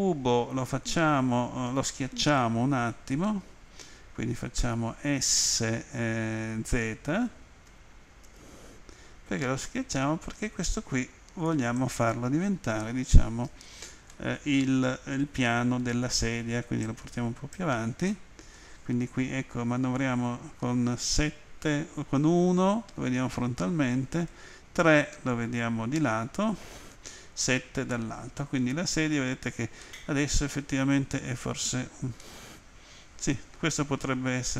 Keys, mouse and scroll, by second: 8.2 z, 11.8 click, 14.1 middle click, 16.8 click, 18.1 middle click, 20.0 Page_Down, 22.2 End, 24.5 Page_Down, 27.0 Home, 29.8 middle click, 32.2 middle click.